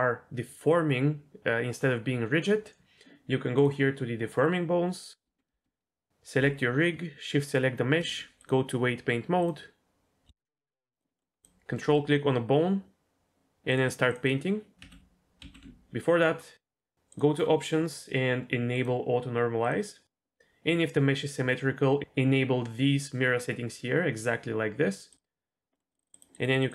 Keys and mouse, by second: 3.6 click, 5.2 Tab, 7.4 shift+click, 8.4-9.5 drag, 10.5 middle click, 11.0 click, 11.2 middle click, 13.8 click, 13.9 click, 14.3 click, 14.7 ctrl+z, 14.9 ctrl+z, 15.5 ctrl+z, 17.1 click, 19.6 click, 25.7 middle click, 26.0 click, 26.1 click, 26.4 click.